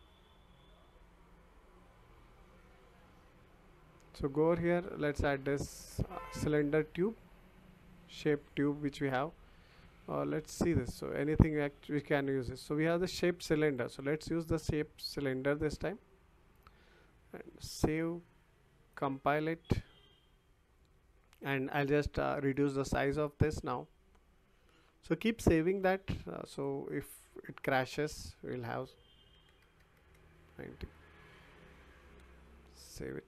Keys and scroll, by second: 29.3 9, 29.9 Return.